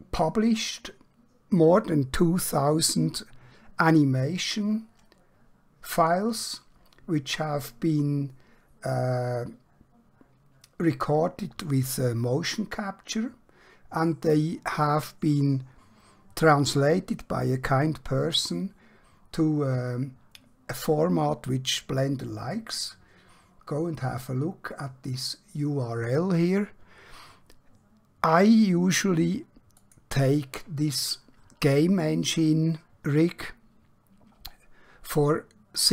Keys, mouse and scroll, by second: 29.7 click, 33.6 scroll down 1, 34.3 scroll up 1.